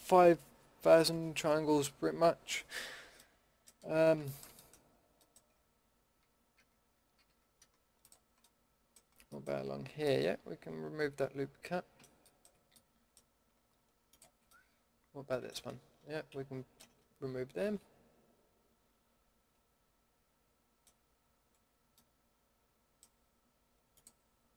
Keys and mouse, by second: 3.2-4.9 middle drag, 5.5 Tab, 5.8 Tab, 7.1 a, 8.5-8.8 middle drag, 14.5-15.3 middle drag, 16.3 ctrl+x, 22.1 middle click, 22.3 middle click, 22.7-24.5 drag.